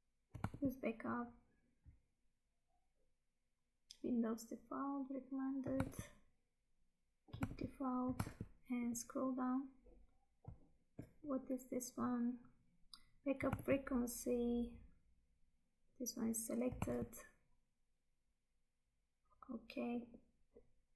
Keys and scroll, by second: 0.6 Tab, 5.9 Tab, 7.5 Tab, 13.6 Tab, 16.9 Tab.